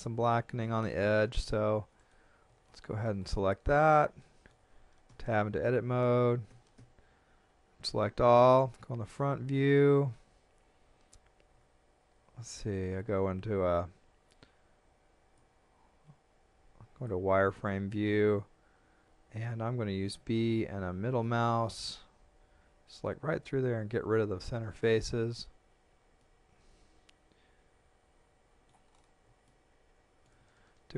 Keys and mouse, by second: 1.4 KP_3, 2.0 right click, 2.7 shift+middle click, 4.2 shift+middle click, 5.1 Tab, 6.5 a, 8.6 KP_1, 11.6 Tab, 13.0 z, 15.4 click, 20.1 b, 21.3 middle click, 26.2 middle click, 29.5 shift+middle click.